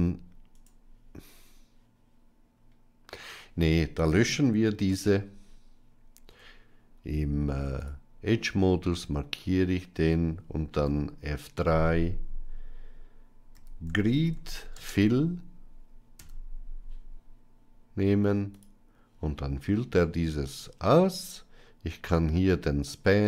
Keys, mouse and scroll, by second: 4.8 x, 6.2 Tab, 10.8 F3, 23.1 click.